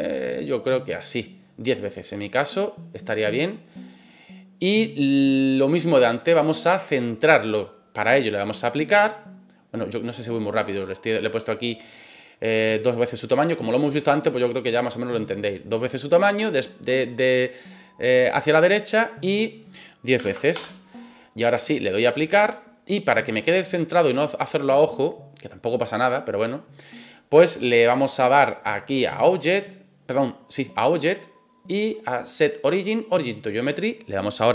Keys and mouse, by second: 2.8 click, 10.6-11.8 drag, 19.3-20.7 drag, 21.9 click, 24.1-26.5 drag, 29.0-33.2 drag.